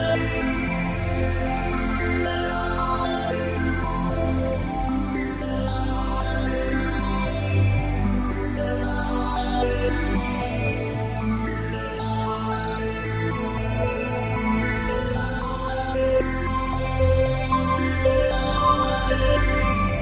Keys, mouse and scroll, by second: 10.0 click, 14.1 right click, 16.1 right click, 19.1 shift+right click.